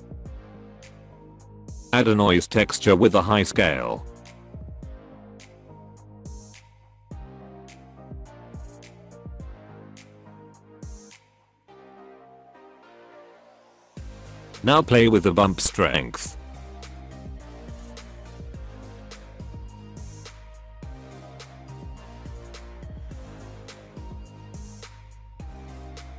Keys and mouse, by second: 0.2 shift+a, 5.1-6.1 drag, 8.0 shift+middle click, 9.7-10.8 drag, 11.0 click, 12.1-14.4 drag, 15.9 shift+middle click, 19.2-22.3 drag, 22.7 click, 24.5 middle click, 25.3-26.1 drag.